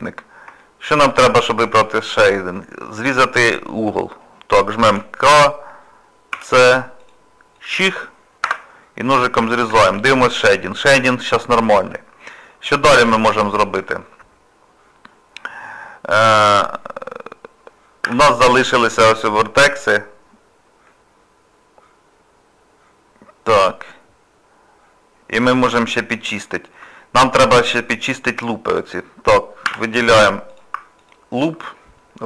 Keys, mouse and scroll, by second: 1.1 middle click, 8.9 scroll down 2, 9.5 shift+middle click, 9.9 Tab, 10.2 middle click, 12.4 scroll up 1, 13.0 Tab, 13.5 shift+middle click, 14.1 middle click, 20.9 middle click, 26.5 shift+middle click, 26.9 middle click, 28.2-29.5 scroll up 3, 29.7 2, 30.5 click, 31.0 alt+click, 31.7 scroll up 1, 31.8 scroll down 2.